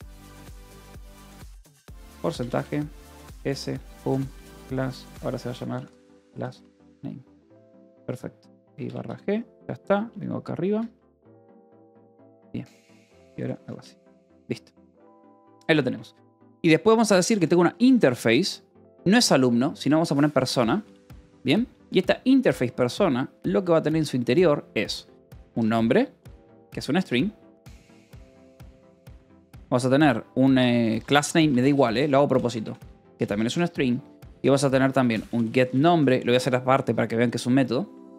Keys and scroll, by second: 1.4-7.2 typing, 8.5 /, 8.8 g, 8.9 Return, 9.8-13.4 typing, 10.5 Escape, 13.6 Escape, 14.5 j, 15.5 o, 15.7 Return, 18.6 space, 19.8-20.9 typing, 22.4 Return, 25.0-36.3 typing.